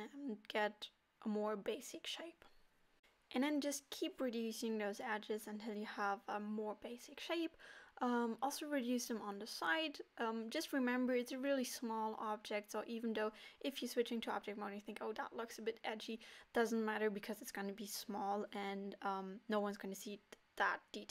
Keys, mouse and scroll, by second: 0.3 middle click, 0.8 middle click, 1.2 middle click, 1.5 alt+click, 1.7 alt+shift+click, 2.3 g, 2.6 KP_7, 2.8 g, 3.3 middle click, 3.4 scroll up 2, 3.7 alt+click, 3.8 x, 4.3 middle click, 4.3 scroll down 1, 4.3 shift+middle click, 4.4 middle click, 4.7 alt+click, 4.9 x, 5.0 scroll down 1, 5.1 middle click, 5.3 scroll up 1, 5.4 alt+click, 5.7 alt+shift+click, 5.9 middle click, 6.2 scroll down 1, 6.4 middle click, 6.4 shift+middle click, 6.5 scroll up 1, 6.7 alt+click, 6.9 alt+shift+click, 7.0 alt+click, 7.1 x, 7.2 middle click, 7.4 middle click, 8.0 scroll up 1, 8.2 shift+middle click, 8.4 Tab, 8.6 Tab, 8.6 a, 9.0 Tab, 9.1 middle click, 9.2 alt+a, 9.3 middle click, 9.5 scroll up 1, 10.4 alt+click, 10.5 x, 10.6 middle click, 11.2 alt+click, 11.2 x, 11.4 middle click, 11.6 alt+click, 11.7 x, 11.8 middle click, 11.9 shift+middle click, 12.3 shift+click, 12.5 alt+click, 12.6 alt+shift+click, 12.7 middle click, 12.8 alt+shift+click, 12.9 middle click, 13.2 alt+shift+click, 13.2 middle click, 13.6 alt+click, 13.7 x, 14.1 alt+click, 14.2 x, 14.3 middle click, 14.8 alt+click, 14.9 alt+shift+click, 15.0 x, 15.1 scroll down 4, 15.2 alt+a, 15.2 middle click, 15.3 scroll up 2, 15.8 Tab, 15.8 middle click, 15.9 Tab, 16.0 scroll up 1, 16.2 alt+a, 16.3 middle click, 16.8 alt+click, 16.8 x, 16.9 u, 17.0 scroll down 3, 17.1 middle click, 17.3 alt+click, 17.4 x, 17.5 middle click, 17.7 scroll up 1, 17.9 scroll down 1, 18.0 middle click, 18.3 middle click, 18.4 scroll down 2, 18.4 middle click.